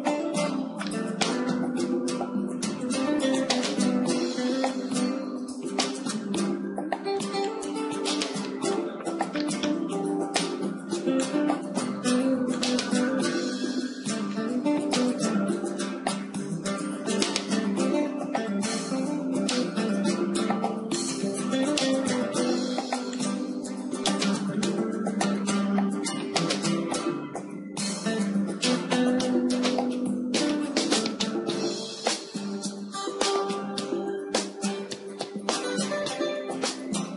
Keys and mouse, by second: 0.3-2.4 middle drag, 2.8 middle click, 3.6-5.6 drag, 5.6-7.0 middle drag, 6.0 z, 6.3 a, 7.0 b, 8.1 click, 9.2-11.2 middle drag, 11.2-14.9 drag, 14.8 KP_0, 16.3-18.3 drag, 18.3 KP_1, 19.7 KP_3, 21.7 a, 22.0 a, 23.2-25.1 drag, 26.6-29.9 right drag, 28.0 KP_0, 31.6 Tab, 32.2 Tab, 33.8 KP_3.